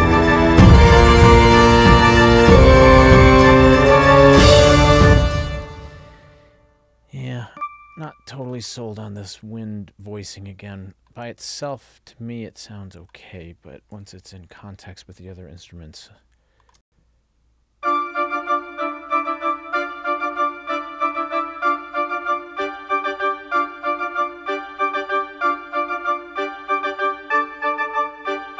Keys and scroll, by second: 5.1 space, 16.9 space.